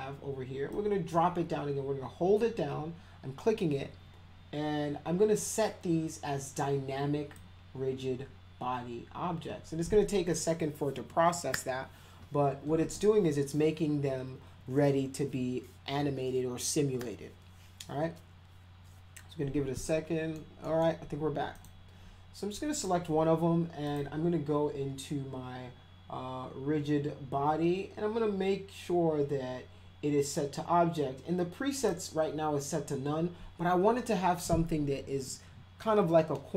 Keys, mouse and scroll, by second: 0.7-7.3 drag, 19.8 middle click, 20.6 middle click, 21.5 click, 22.7 click, 23.8 click, 27.0 drag, 31.8 click.